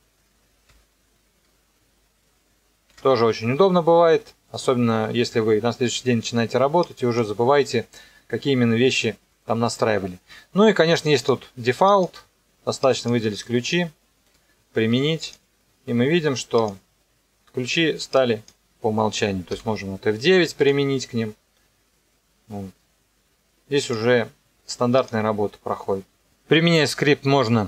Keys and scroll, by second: 0.7 KP_0, 2.9 KP_0, 19.5 F9, 20.6 KP_0.